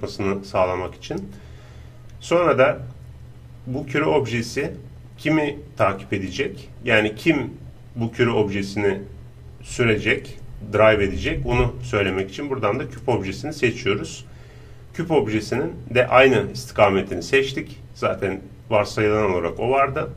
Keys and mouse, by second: 1.7-5.1 middle drag, 12.1-14.5 drag.